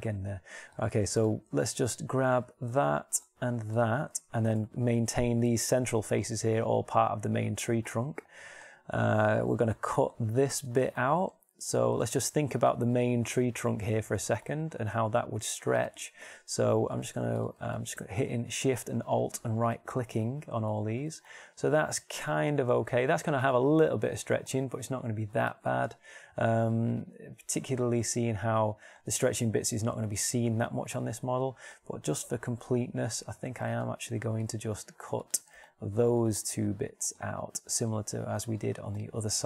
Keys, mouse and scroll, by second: 2.5-4.2 middle drag, 8.5-9.8 middle drag, 15.7 shift+middle click, 18.3-19.8 alt+shift+middle drag.